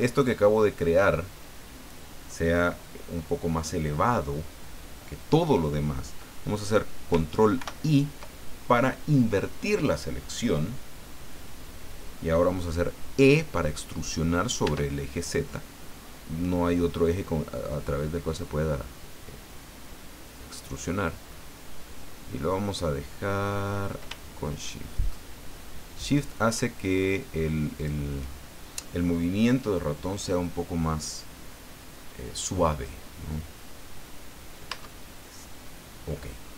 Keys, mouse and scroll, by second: 7.6 ctrl+i, 14.6 e, 27.8 shift+click, 34.7 Tab, 36.4 scroll down 2.